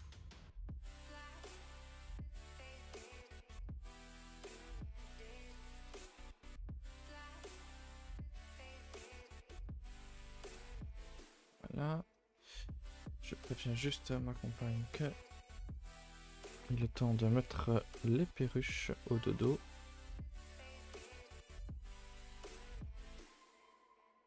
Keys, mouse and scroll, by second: 0.3-5.4 drag, 5.4 BackSpace, 6.1 a, 6.3 a, 7.1 click, 8.1-10.6 drag, 10.6 a, 10.7 a, 11.5-24.2 middle drag.